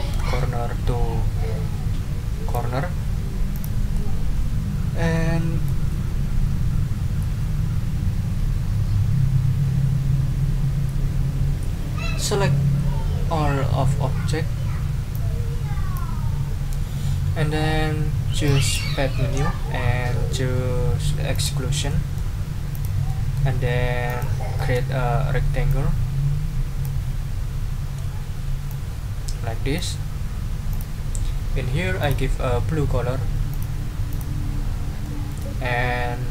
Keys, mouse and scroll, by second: 2.9 ctrl+scroll down 2, 3.5 ctrl+click, 3.9 ctrl+scroll down 2, 4.1-5.8 middle drag, 15.1-16.1 drag, 18.4 click, 21.3 click, 21.9 middle click, 22.7 click, 23.1 middle click, 24.0 click, 24.5 click, 24.8 ctrl+middle click, 25.7-27.0 drag, 28.0 ctrl+z, 28.7-29.9 ctrl+drag, 30.7 click, 32.0 click, 33.5 click, 34.1 click, 35.0 middle click.